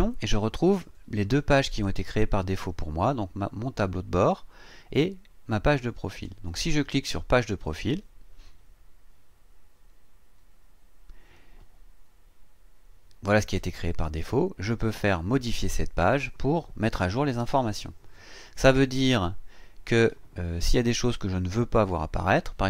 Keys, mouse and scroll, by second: 0.1 click, 2.1 click, 7.6 click, 15.5 click.